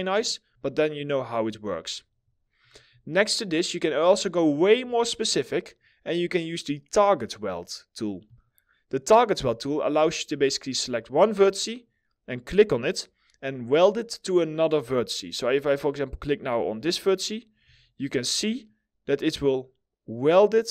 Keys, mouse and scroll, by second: 2.9 middle click, 3.3-3.7 scroll up 1, 3.8 alt+middle click, 4.5 scroll up 1, 4.9 middle click, 17.0 scroll down 1, 17.3 alt+middle click, 17.9 middle click, 18.2-19.0 scroll up 1, 20.6 alt+middle click.